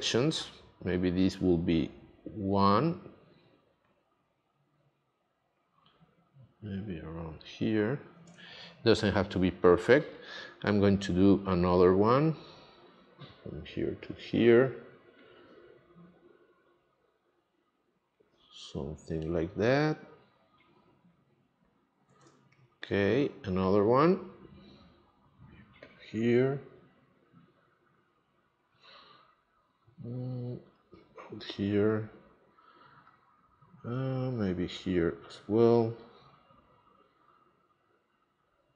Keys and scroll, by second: 8.3 space, 22.2 space.